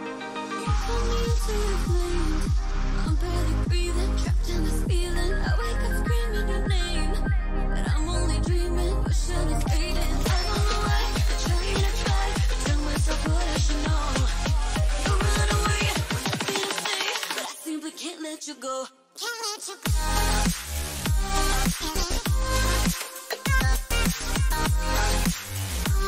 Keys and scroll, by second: 3.5 ctrl+t, 8.3 Return, 17.3 ctrl+t, 22.0 Return.